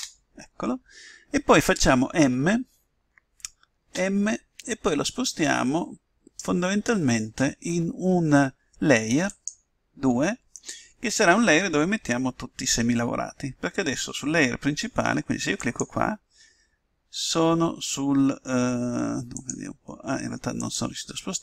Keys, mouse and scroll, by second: 3.9 m.